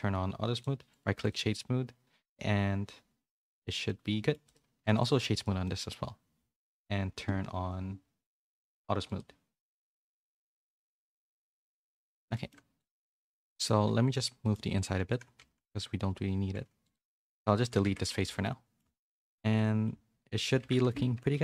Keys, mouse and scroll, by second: 0.5 click, 0.9 right click, 2.2 click, 3.8 middle click, 4.4 click, 5.0 right click, 5.6-9.1 middle drag, 9.1 click, 11.3 click, 12.2 a, 12.3 middle click, 12.9 Tab, 13.2 z, 13.5 middle click, 13.7 3, 14.0 click, 14.4 middle click, 14.9 z, 15.3 g, 17.0 x, 17.8 Tab, 18.0 a, 18.2 a, 18.4 middle click, 18.9 middle click, 20.4 click, 20.6 Tab, 20.8 a, 21.3 KP_3.